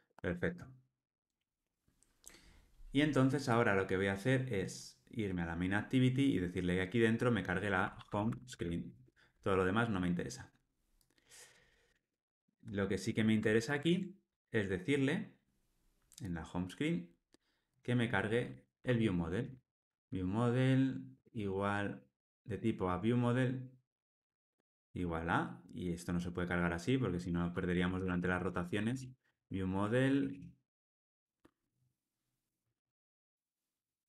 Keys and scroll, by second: 9.0 Return, 13.5 alt+super+l, 13.8 ctrl+alt+o, 24.5 Tab.